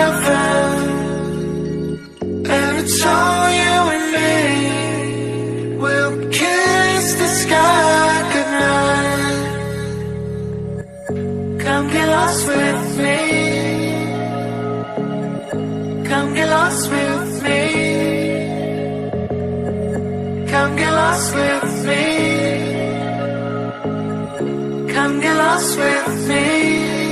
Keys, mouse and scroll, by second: 0.5 click, 2.8-3.5 scroll up 3, 3.5 scroll up 1, 3.6-4.8 scroll down 1, 4.8 click, 5.2 click, 6.3 KP_Divide, 7.1 click, 7.7 KP_1, 8.0 KP_7, 8.5 shift+a, 10.7-11.2 scroll up 1, 11.2 scroll down 1, 11.4 s, 12.8 s, 15.3 g, 17.0 s, 18.3 g, 20.0-20.7 scroll up 2, 20.7-21.7 drag, 21.7 KP_1, 22.9 r, 25.0-25.7 scroll up 4, 25.7 g.